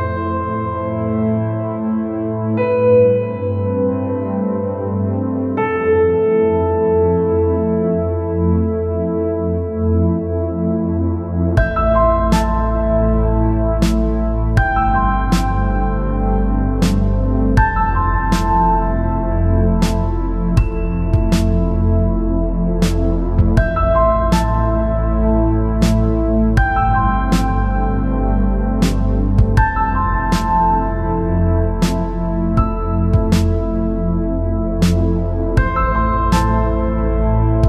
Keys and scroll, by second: 19.0 Up, 20.6 ctrl+0, 27.4 Up.